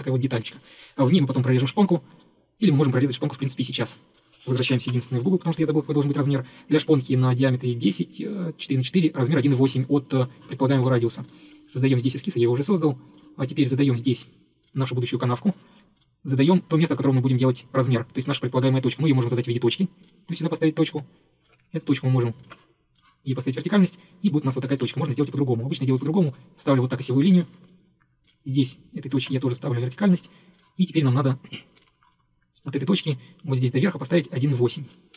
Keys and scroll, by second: 4.8 ctrl+8, 15.3 Escape, 15.4 Escape, 20.4 Escape, 20.5 Escape, 24.9 Delete, 27.5 Escape, 27.6 Escape, 31.8 Escape, 35.0-35.1 typing.